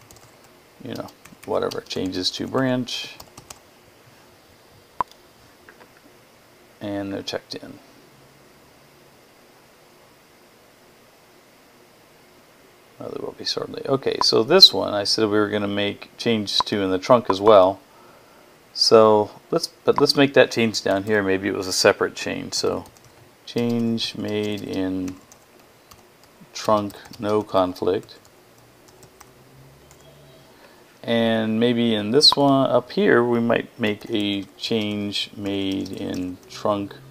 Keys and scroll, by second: 0.0-3.8 typing, 22.0-30.0 typing, 33.4-37.1 typing.